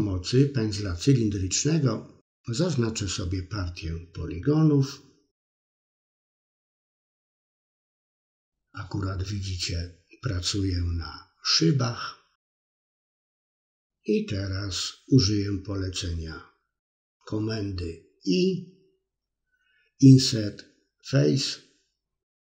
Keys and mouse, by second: 5.6 middle click, 8.0 c, 13.5-15.7 middle drag, 16.0 middle click, 17.1 middle click, 18.8 i.